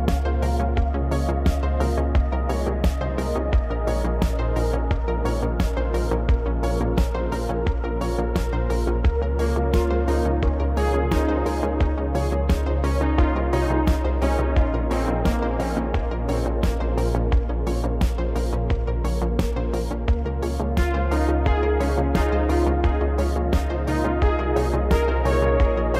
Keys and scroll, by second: 0.1 e, 1.6 s, 3.4 3, 4.5 i, 6.1 s, 6.6 shift+z, 11.1 Tab, 13.1 Tab, 14.3 ctrl+r, 16.9 ctrl+b, 19.1 e, 19.5 alt+s, 23.0 s, 23.2 z, 24.4 Tab.